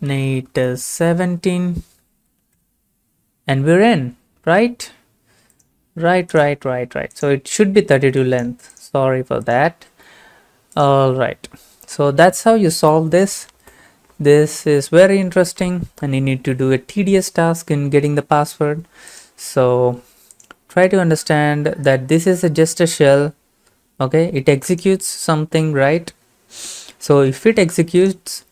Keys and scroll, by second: 0.0-1.9 typing, 2.6 Return.